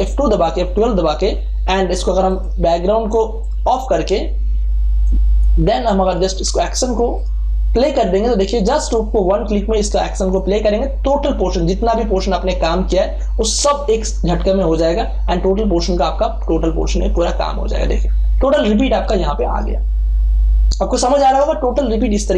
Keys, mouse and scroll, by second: 2.2 click, 2.3-7.1 drag, 15.8 click, 18.7 ctrl+space, 18.9 ctrl+click, 19.5 ctrl+space, 20.1 ctrl+space, 20.7 ctrl+space.